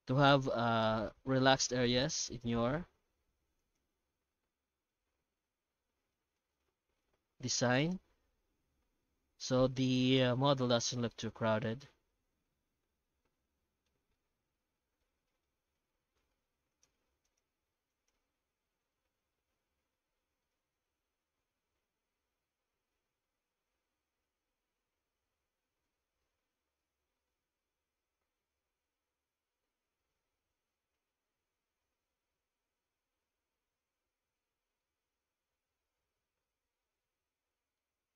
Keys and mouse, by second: 0.6 w, 1.6 2, 2.1 alt+a, 3.6 alt+shift+right click, 4.7 g, 6.9 ctrl+r, 8.5 Tab, 9.1 alt+h, 9.7 alt+a, 10.0 right click, 10.3 Tab, 11.3 middle click, 12.1 Tab, 12.4-13.8 middle drag, 14.2 shift+middle click, 14.8 Tab, 14.8 middle click, 15.2 shift+middle click, 15.7 alt+a, 16.2 3, 16.7 shift+right click, 17.2 shift+right click, 17.9 shift+right click, 18.4 q, 19.4 Tab, 20.0 shift+q, 35.0-37.7 middle drag.